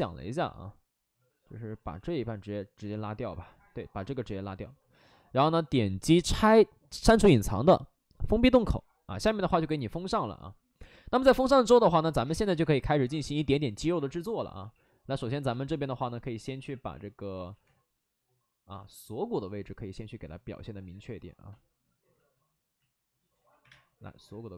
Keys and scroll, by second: 12.4 space, 13.2 x, 14.5 x, 15.0 x, 16.5 x, 17.3 ctrl+z, 17.5 2, 22.1 ctrl+z, 22.7 ctrl+z, 23.3 ctrl+z, 23.5 1, 23.6 space.